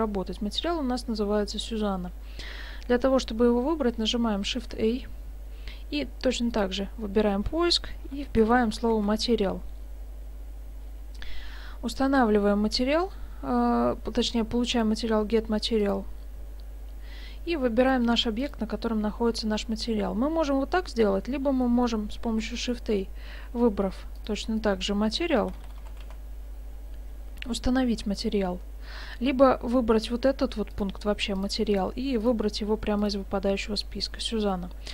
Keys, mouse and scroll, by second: 4.6 shift+a, 17.8 click, 20.8 typing, 21.7 middle click, 22.4 shift+a, 31.7 click, 32.2 click.